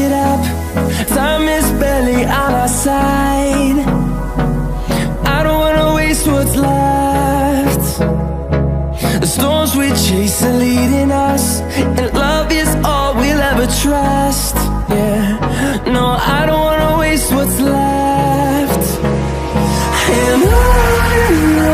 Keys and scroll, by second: 19.8 ctrl+l.